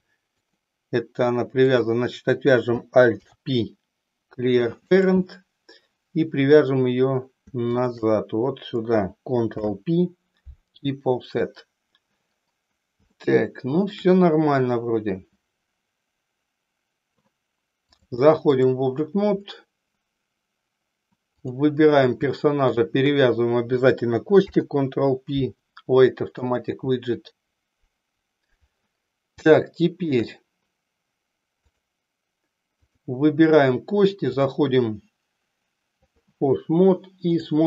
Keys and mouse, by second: 1.6 click, 3.2 alt+p, 6.3 click, 7.8 shift+click, 9.5 ctrl+p, 13.3 shift+middle click, 18.0 click, 21.3 click, 24.4 ctrl+p, 29.8 shift+middle click, 31.5 click, 32.9 click, 34.3-36.3 drag.